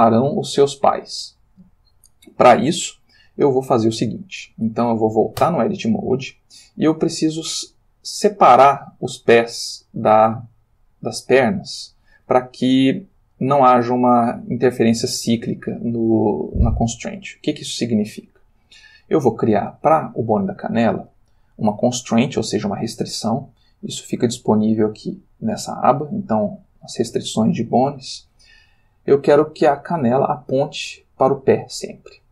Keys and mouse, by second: 5.4 Tab, 6.6 click, 7.7 g, 9.0 Escape, 10.0 click, 10.4 g, 11.3 Escape, 16.0 Tab, 18.9 click, 24.3 click, 31.9 click.